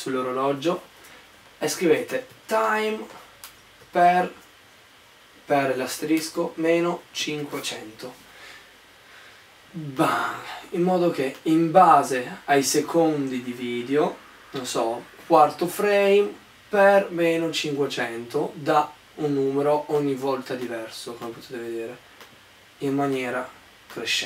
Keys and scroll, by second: 1.8-3.1 typing, 4.1 shift+*, 6.4-8.0 typing.